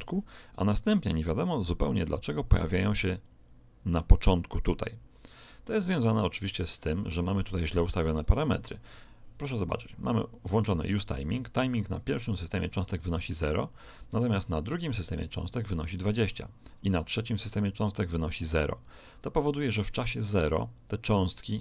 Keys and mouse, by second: 1.1 click, 8.2 right click, 11.7 click, 15.0 click, 17.1 click.